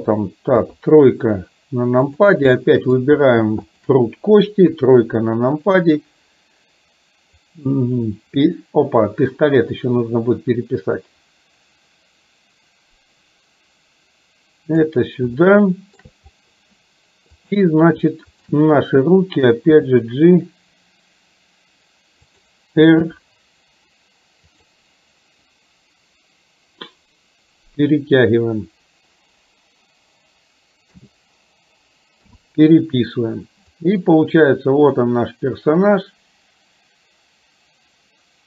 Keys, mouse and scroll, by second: 0.5 KP_3, 2.2 click, 2.5 middle click, 3.8 shift+click, 4.7 KP_3, 7.7-15.0 drag, 15.5-16.2 shift+middle drag, 18.4 shift+click, 19.8 g, 23.2 r, 31.0 a, 32.3 i, 33.9-38.4 drag.